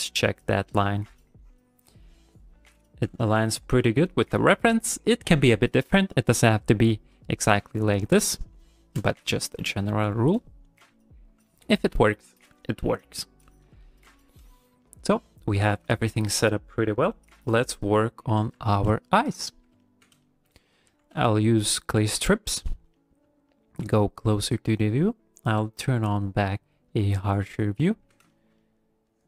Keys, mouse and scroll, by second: 0.4 click, 0.7 click, 1.1 click, 1.4 click, 1.8 click, 2.3 click, 2.7 click, 3.0 click, 3.3 click, 3.6 click, 9.2 ctrl+middle click, 11.2 click, 13.8 shift+middle click, 14.2 middle click, 14.8 ctrl+middle click, 15.1 middle click, 15.7 ctrl+middle click, 15.9 ctrl+middle click, 17.0 middle click, 18.7 middle click, 19.1 middle click, 19.5 middle click, 19.8 ctrl+middle click, 20.2 shift+middle click, 20.9 q, 22.3 ctrl+middle click, 22.7 shift+middle click, 23.0 middle click, 23.5 shift+middle click, 24.0 middle click, 24.3 shift+middle click, 25.6 click, 27.5 middle click, 28.3 shift+middle click, 28.6 middle click, 29.1 click.